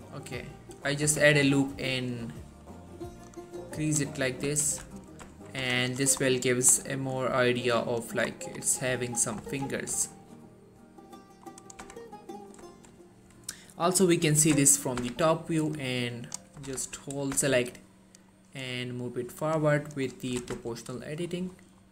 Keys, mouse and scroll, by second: 0.9 scroll up 1, 1.2 Tab, 1.5-2.8 middle click, 2.8 scroll up 1, 3.4-4.6 click, 4.3 middle click, 4.8 ctrl+z, 5.2 middle click, 5.8 Tab, 6.1 click, 6.3 scroll down 1, 6.5 middle click, 6.8 scroll up 1, 7.0 middle click, 7.9-8.4 scroll up 1, 8.4-9.2 scroll down 2, 8.5 middle click, 9.6 1, 10.3 shift+middle click, 10.5-10.9 scroll up 1, 11.3 middle click, 11.8 click, 11.9 Tab, 12.1-12.8 middle click, 14.4 7, 14.9 scroll up 1, 15.1 z, 15.9-16.5 click, 16.7 g, 16.8 y, 17.4 x, 18.3 right click, 19.7 click, 20.4 g, 20.7 x, 21.0-21.3 scroll up 1.